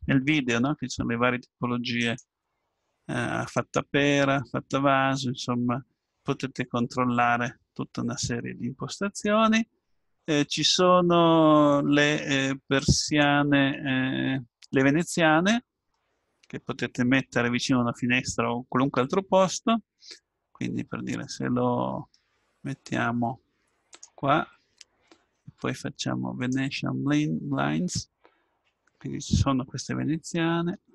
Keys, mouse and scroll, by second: 2.0-3.9 drag, 5.5-6.5 middle drag, 8.4-10.2 drag, 12.8-15.1 drag, 15.1-20.5 middle drag, 22.1-23.9 middle drag, 23.9-30.8 drag.